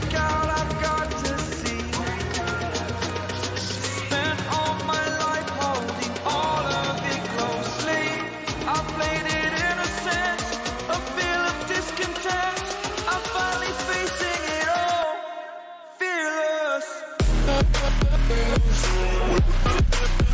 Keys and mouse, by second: 1.3 ctrl+c, 3.2 click, 7.6 click, 11.1 ctrl+v, 15.5 click, 16.9 ctrl+t, 18.0-20.3 drag.